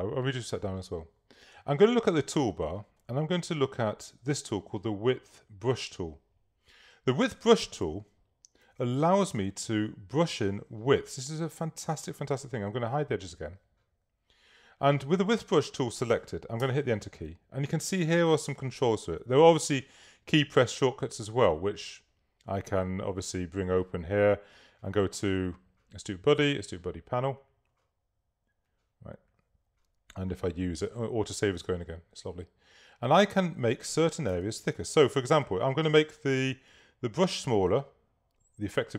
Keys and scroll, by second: 8.8 super+a, 16.6 Return, 34.5 super++, 35.3 super+space, 36.2 space, 36.5 [.